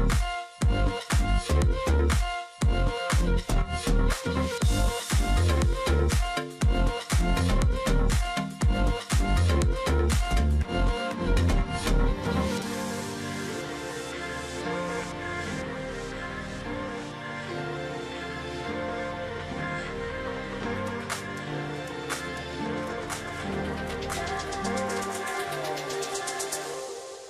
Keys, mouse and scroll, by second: 0.4 space, 1.4 space, 3.3 ctrl+click, 4.1 ctrl+click, 5.0 ctrl+click, 6.1 ctrl+click, 6.8 ctrl+click, 9.6 ctrl+click, 10.1 ctrl+z, 10.7 ctrl+click, 10.8 ctrl+double click, 12.0 ctrl+click, 13.1-13.6 alt+scroll down 1, 14.9 ctrl+click, 15.1-15.5 alt+scroll down 1, 15.7 alt+scroll up 1, 16.5 ctrl+click, 17.8 space, 18.5 space, 19.9 space, 20.3 ctrl+z, 21.1 ctrl+z, 22.1 space, 24.1 ctrl+click, 24.2 alt+scroll down 1, 24.4-25.4 alt+scroll up 2, 24.7 ctrl+click.